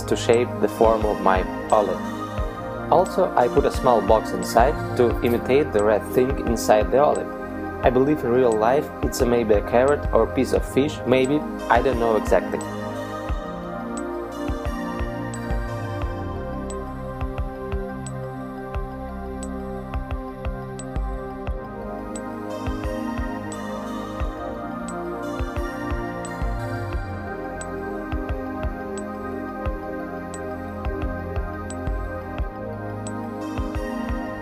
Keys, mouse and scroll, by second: 0.0 middle click, 2.2 middle click, 5.3 right click, 5.6 Tab, 6.7 middle click, 11.2 l, 12.0 middle click, 13.4 middle click, 22.4 Tab, 24.9-25.6 scroll down 1, 25.6 alt+h, 27.2-28.8 scroll down 8, 29.3 middle click, 30.2-30.7 scroll down 1, 30.7 right click, 31.1 Tab, 31.6 middle click, 33.4 Tab, 33.8 right click, 34.3 Tab.